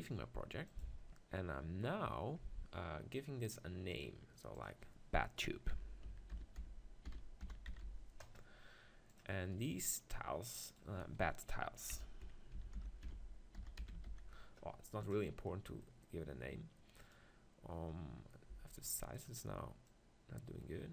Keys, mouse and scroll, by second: 0.1-2.1 drag, 9.5-14.5 right drag, 15.5-17.0 middle drag, 17.0-18.5 right drag, 18.5 s, 19.3-20.9 drag.